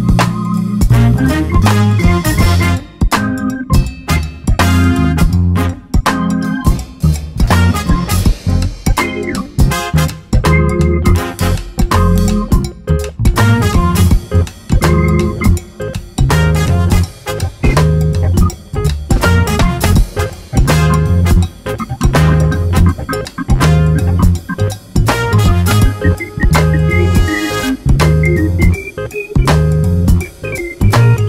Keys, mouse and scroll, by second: 1.6-2.1 scroll down 2, 1.9 a, 3.4 scroll up 1, 3.9 click, 5.2 scroll up 1, 5.7 scroll down 1, 6.8 click, 8.5-9.8 drag, 11.4 Delete, 12.6 click, 15.0 scroll up 2, 15.2 alt+a, 15.4 click, 18.0-19.9 drag, 20.1 scroll down 1, 20.2 alt+a, 20.5 click, 22.8 scroll down 1, 23.0 alt+a, 23.3 scroll up 1, 24.4 click, 25.8-29.0 drag, 27.3 scroll up 1, 27.4 alt+a, 28.2 scroll down 2, 30.5 alt+a, 30.8 click.